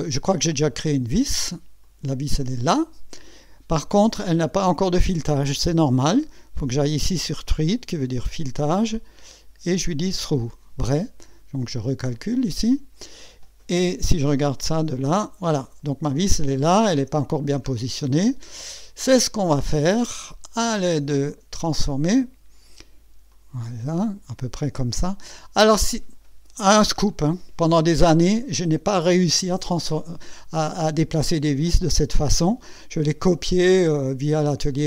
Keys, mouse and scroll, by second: 1.8 click, 2.4 space, 8.5 click, 9.2 click, 10.1 click, 12.1 click, 14.3 KP_6, 14.9-15.2 scroll up 1, 15.6 right click, 16.5 scroll up 1, 17.5 scroll down 1, 17.9-18.5 right drag, 20.5 right click, 21.3 click, 23.3-25.1 drag.